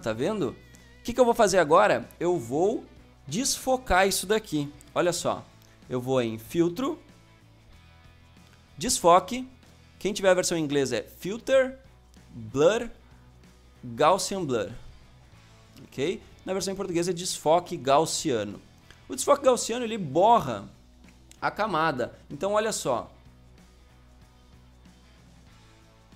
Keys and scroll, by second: 4.9 ctrl+0.